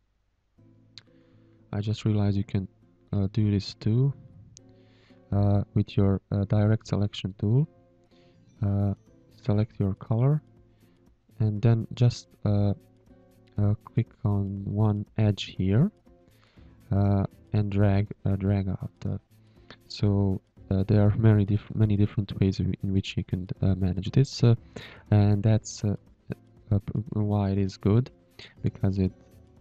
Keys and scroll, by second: 0.5 space, 1.2 shift+a, 2.3 Delete, 4.9 a, 5.8 space, 7.3 a, 8.0 a, 9.3 Delete, 18.7 space, 19.4 space, 20.0 Delete, 22.3 Delete, 23.8 h, 24.5 a, 25.2 space, 26.0 shift+a, 28.2 ctrl+z.